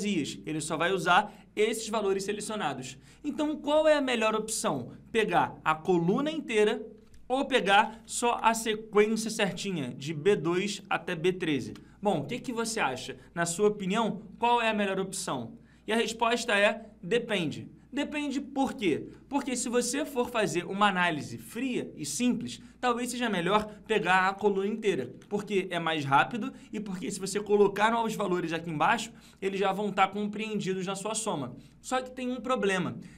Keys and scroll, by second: 5.1 F2, 19.0 F2.